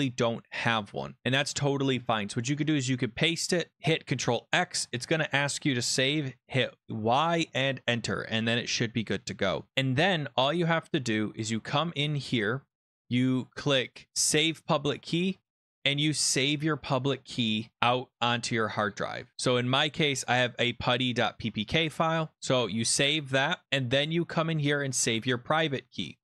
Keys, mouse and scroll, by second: 4.0 ctrl+x, 11.4 click, 14.3 click, 16.0 click, 19.3 scroll down 17, 20.2 click, 23.0 scroll, 23.6 click, 24.7 click.